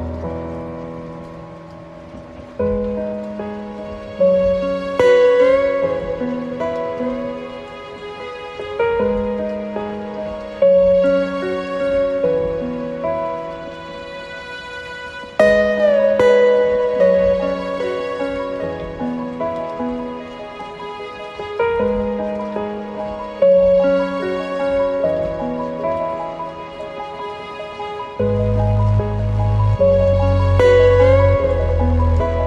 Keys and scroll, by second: 10.9 ctrl+t, 16.3 ctrl+z, 31.2 ctrl+t.